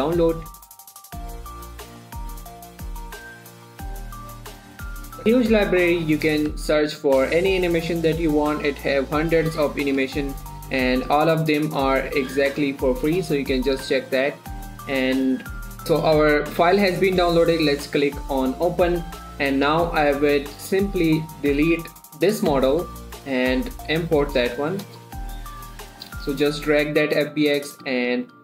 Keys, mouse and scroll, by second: 1.8 click, 5.2 click, 5.7 scroll up 1, 7.0 click, 9.9 scroll down 1, 11.2 click, 13.3 scroll down 1, 15.4 scroll down 1, 18.0 click, 20.3 click, 21.5 middle click, 23.7 F4, 25.2-28.4 drag.